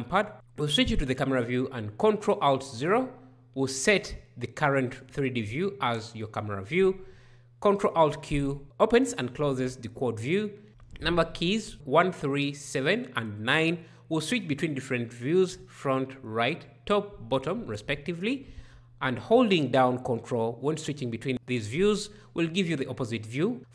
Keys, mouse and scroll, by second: 2.1 ctrl+alt+KP_0, 7.1 ctrl+alt+q.